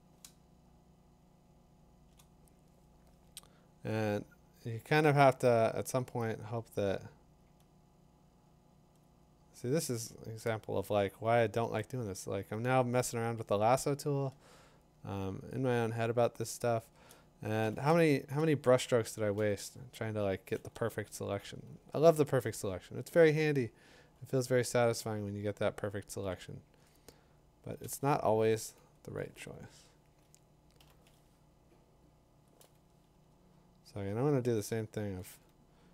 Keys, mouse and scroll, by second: 0.9-1.5 scroll, 2.1-4.3 click, 8.8 click, 9.4 click, 10.0 click, 10.6 click, 12.5-13.7 scroll, 14.9-15.4 click, 15.1 click, 15.6 click, 15.8 click, 15.9 click, 16.0 click, 16.3 click, 16.7 click, 16.8 click, 17.1 click, 17.6 b, 19.4 b, 21.6 ], 21.9 ], 22.1 ], 22.4 ], 27.8 click, 29.0-29.5 typing, 30.8 b, 32.5 click, 33.2-33.9 ], 34.9 [, 35.2 [, 35.5 [.